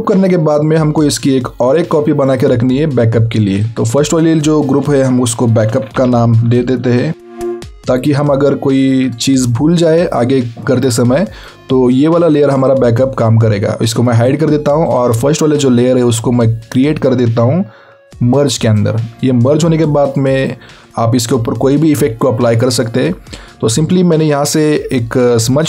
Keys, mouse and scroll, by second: 1.2 alt+z, 1.8 alt+click, 5.5-7.4 typing, 8.4 click, 12.8 click, 19.3 click, 23.2 alt+scroll down 1.